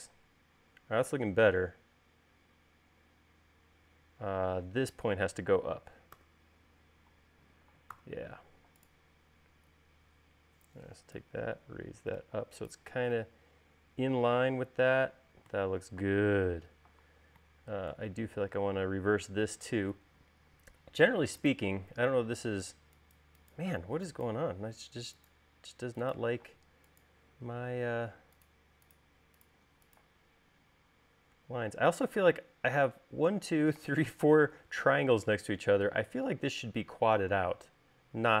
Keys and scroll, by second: 0.0 u, 6.8 u, 8.5 v, 24.4 e, 27.1 space.